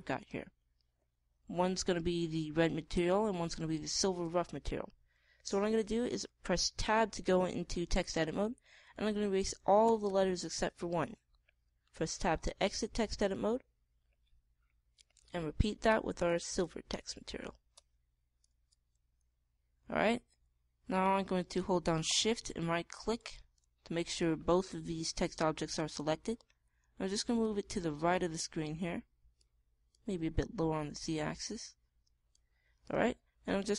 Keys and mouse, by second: 7.7 Tab, 10.1 BackSpace, 10.8 BackSpace, 13.1 Tab, 14.3 Tab, 16.9 Tab, 17.2 BackSpace, 17.4 BackSpace, 18.7 Tab, 19.6 Tab, 25.9 g, 28.3-30.1 drag.